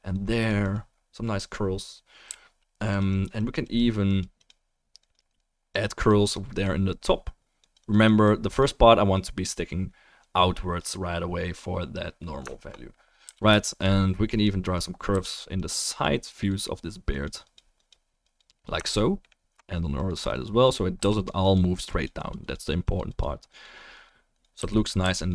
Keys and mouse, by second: 2.2 f, 2.9 click, 12.5-13.4 alt+middle drag, 13.2 f, 13.4 click, 13.5-16.7 shift+right drag, 13.6-16.7 middle drag, 14.3-15.3 drag, 15.1 f, 15.5-16.7 drag, 19.3 alt+middle click, 21.0 f, 21.2 right drag, 24.6 f, 24.8-25.3 drag, 25.0 f.